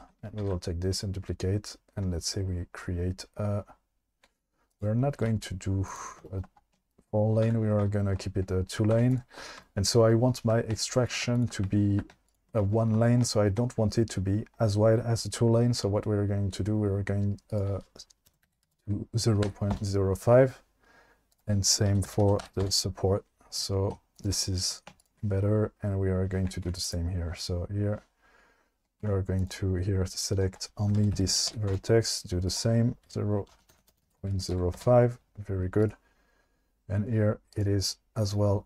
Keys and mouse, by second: 0.4 shift+d, 5.2 x, 7.4 1, 8.9 2, 11.3 ctrl+click, 17.6-19.8 drag, 21.4-22.7 drag, 25.0 shift+click, 26.6 2, 29.0 1, 30.4-31.7 drag, 32.5-34.8 drag, 33.7 BackSpace.